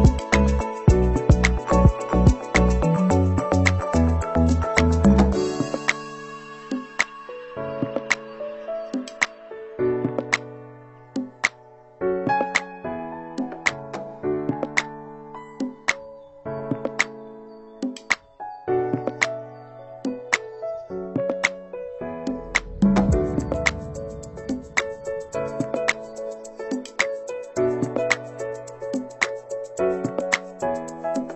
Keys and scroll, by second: 22.7 ctrl+].